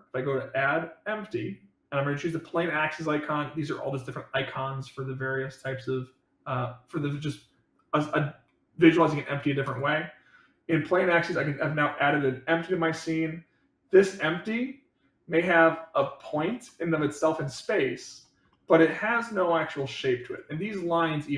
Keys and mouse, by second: 15.3-15.9 drag, 16.5-17.0 middle drag, 17.5 middle click, 18.0 click, 18.4-19.3 middle drag, 19.6 middle drag, 20.1 click.